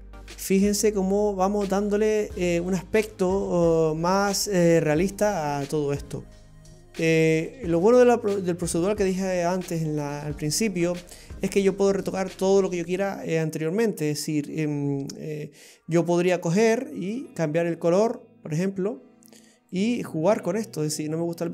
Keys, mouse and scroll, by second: 0.7-3.3 scroll down 21, 5.3-5.6 scroll down 5, 6.1 middle click, 7.5 click, 10.5 scroll up 3, 11.2 middle click, 15.8-17.1 scroll up 4, 17.1 click, 17.1-19.1 scroll up 1, 19.8 click.